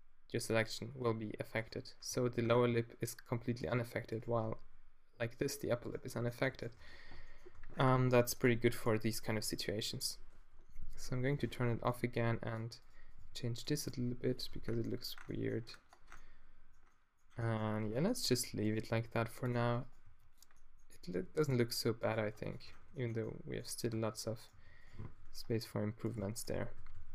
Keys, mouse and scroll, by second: 0.9 g, 1.6-3.5 middle drag, 2.1 g, 4.1-6.5 drag, 4.2 g, 6.8 Tab, 7.6 Tab, 10.8 alt+o, 11.8 g, 12.5-14.0 drag, 13.2 g, 13.9 g, 14.5 Tab, 14.7-15.7 middle drag, 18.3 Tab, 19.0 g, 20.0 click, 20.0 g, 20.5 middle click, 21.1 g, 22.2 g, 22.7 Tab, 22.9 middle click, 24.0 Tab, 24.5 g, 25.0 z, 26.5-27.0 q.